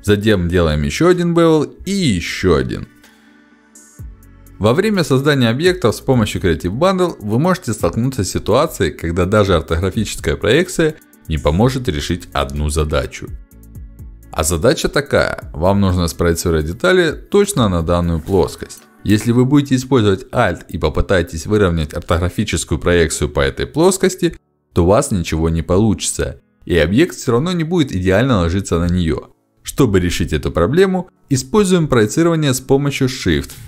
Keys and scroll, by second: 1.6 ctrl+b, 14.2 5, 17.5 ctrl+shift+d, 28.5 ctrl+shift+x, 30.6 space, 33.0 space.